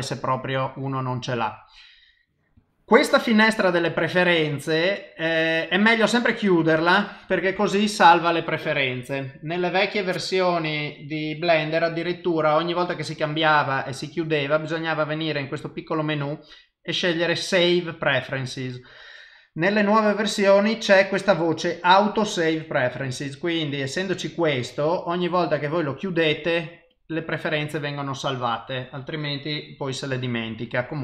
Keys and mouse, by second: 9.2 click, 10.6 click.